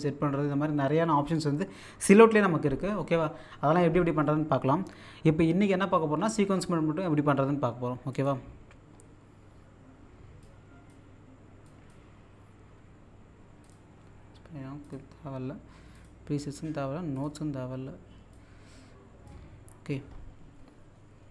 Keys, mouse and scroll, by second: 8.1 click, 10.4 click, 13.6 click, 14.9 click, 17.2-20.2 drag.